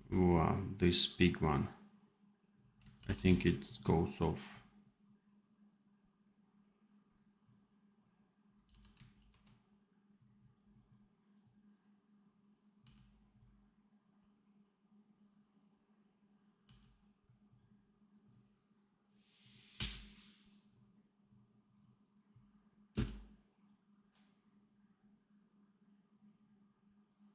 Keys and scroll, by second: 2.9 ctrl+b, 8.6 v, 9.0 ctrl+b, 12.7 d, 16.5 d, 19.6 d, 22.8 space.